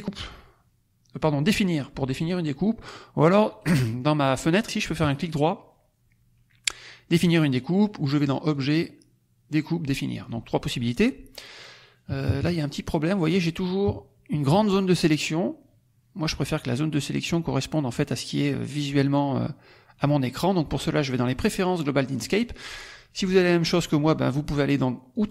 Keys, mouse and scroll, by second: 3.5 right click, 4.9 right click, 8.2 click, 8.4 click, 10.2 click, 11.9 KP_Subtract, 13.0 click, 13.7 KP_Subtract, 22.1 click, 25.1 click.